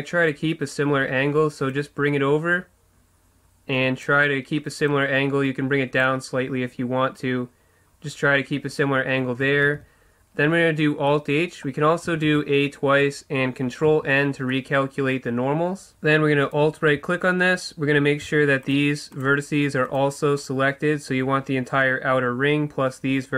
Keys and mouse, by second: 1.9-4.2 drag, 5.0-6.8 drag, 9.8 alt+h, 11.1-12.9 middle drag, 12.1 a, 12.2 a, 13.9 ctrl+n, 16.4-18.1 right drag, 18.1-21.3 drag, 21.3 right click.